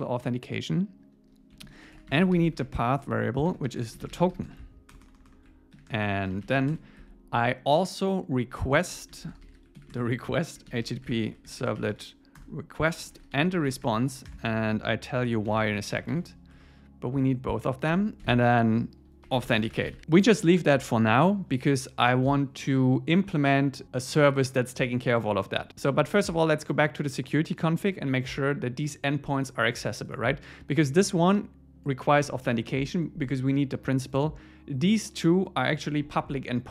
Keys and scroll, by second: 1.7 alt+l, 3.0 Return, 7.0 Escape, 12.4 Return, 16.6 Tab, 18.0 Return, 20.0 super+s.